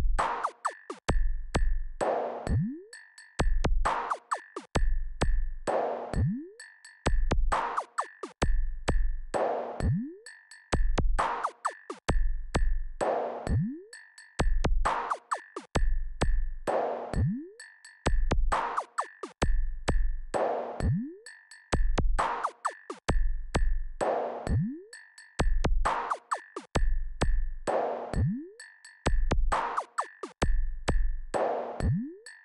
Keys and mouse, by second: 5.7 click, 7.0-11.6 drag, 12.7-14.9 drag, 19.0 KP_2, 19.3 KP_2, 21.0-23.9 drag.